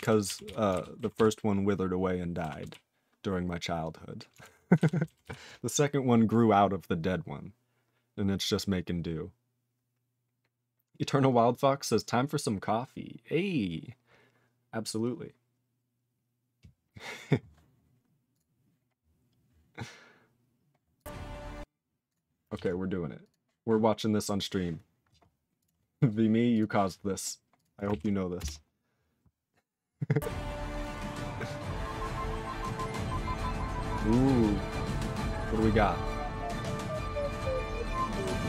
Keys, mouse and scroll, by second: 0.0 ctrl+alt+f, 0.4 ctrl+s, 0.7 ctrl+alt+b, 1.1 ctrl+s, 2.6 ctrl+s, 4.4 ctrl+alt+f, 4.7 ctrl+alt+b, 5.2 ctrl+s.